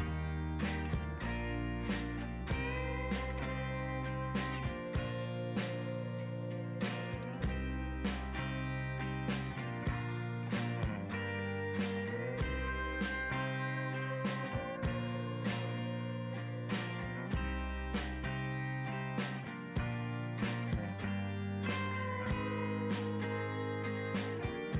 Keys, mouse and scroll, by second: 0.0 z, 0.1 middle click, 0.1-0.4 drag, 0.4 f, 0.6 click, 1.0 middle click, 1.1 ctrl+Tab, 1.1 middle click, 1.2 scroll up 1, 1.3 scroll down 4, 1.3 middle click, 1.6 ctrl+Tab, 1.7 middle click, 1.8 scroll up 1, 1.8 click, 2.1 ctrl+z, 2.4 click, 2.4 middle drag, 2.6 click, 2.8 middle click, 3.1 z, 3.2 middle drag, 3.4 scroll down 2, 3.5 shift+middle drag, 3.7 z, 3.9-4.2 shift+middle drag, 4.2-4.6 scroll up 2, 4.2 z, 4.3 shift+middle click, 4.4 ctrl+Tab, 4.6 f, 4.7-6.0 drag, 6.0 middle click, 6.1 click, 6.3 middle click, 6.4 ctrl+Tab, 6.7 z, 6.8 middle drag, 7.0-7.4 drag, 7.4 middle click, 7.6 click, 7.6 scroll down 4, 7.8 middle click, 7.9 scroll up 3, 8.0 middle click, 8.1 scroll down 1, 8.2-8.6 drag, 8.6 middle drag, 8.7 scroll down 1, 8.7-9.2 middle drag, 9.2 ctrl+Tab, 9.4 middle click, 9.5 scroll up 3, 9.6 middle click, 9.7 click, 9.8 ctrl+Tab, 10.0 shift+middle click, 10.1 scroll up 1, 10.5 click, 10.5 middle click, 10.7-11.9 drag, 11.9 middle click, 12.1 click, 12.5 ctrl+z, 12.6 click, 13.6 click, 14.1 ctrl+z, 14.2 click, 14.8 click, 15.2 ctrl+z, 15.3-15.9 drag, 15.9 middle click, 16.1 scroll down 3, 16.2 middle click, 16.5 scroll up 5, 16.6 middle click, 16.8-17.8 drag, 17.8 ctrl+z, 17.9 click, 18.3-20.8 typing, 18.4 click, 18.7 ctrl+z, 18.7 click, 19.1 click, 19.6 click, 19.8 ctrl+z, 19.9 click, 20.1 ctrl+z, 20.2 click, 20.5 middle click, 20.7 scroll down 2, 20.9 click, 21.3 ctrl+z, 21.4 middle click, 21.5 ctrl+Tab, 21.7 drag, 21.7 middle drag, 22.0 middle click, 22.1 z, 22.3 middle click, 22.5 scroll down 1, 22.6 shift+middle click, 23.0-23.4 scroll up 4, 23.1 middle click, 23.1 ctrl+Tab, 23.4 z, 23.4 shift+middle click, 23.6 z, 24.0 click, 24.1 middle drag, 24.3-24.7 drag.